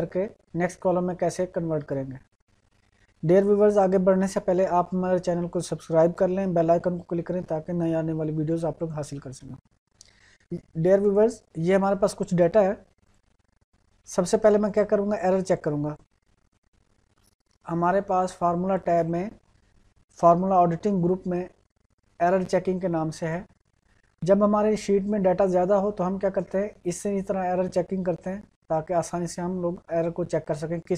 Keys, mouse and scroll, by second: 8.8 click, 23.2-29.0 drag.